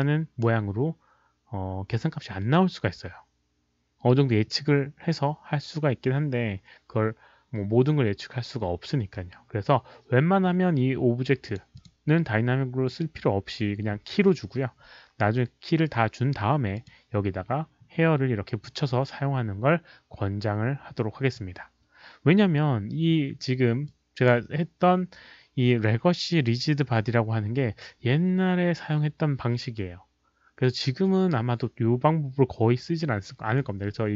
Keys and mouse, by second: 11.4 click, 11.7 click, 16.7 click, 22.2 click, 23.8-24.2 drag.